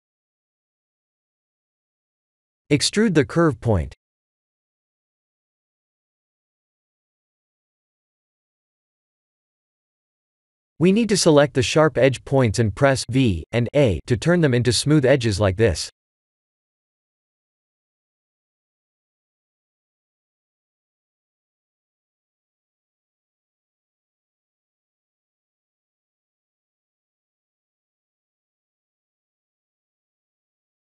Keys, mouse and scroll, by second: 0.8 click, 2.9 Tab, 3.3 e, 6.8 e, 9.2 e, 12.7 click, 13.5 shift+click, 14.0 v, 14.5 Tab, 18.0 click, 20.3 click, 22.0-23.0 scroll down 5, 23.3 shift+click, 27.9 click, 28.2 middle click, 30.7 click.